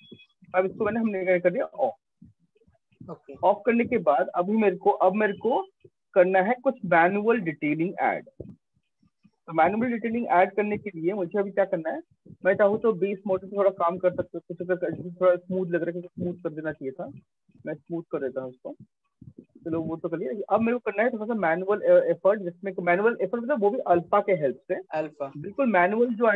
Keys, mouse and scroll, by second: 0.8 shift+click, 1.6 alt+click, 2.6 right click, 4.4-6.2 [, 7.6 right click, 7.8-8.8 typing, 10.1-10.9 ], 11.1 ], 11.3 ], 13.6 shift+click, 15.4 shift+click, 18.3 shift+click, 19.7 shift+click.